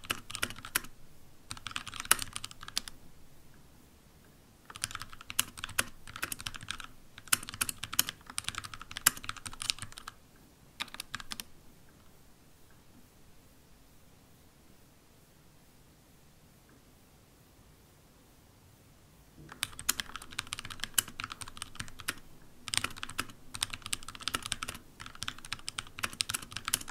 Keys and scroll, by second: 0.0-3.2 typing, 5.3-10.9 typing, 19.7-26.5 typing.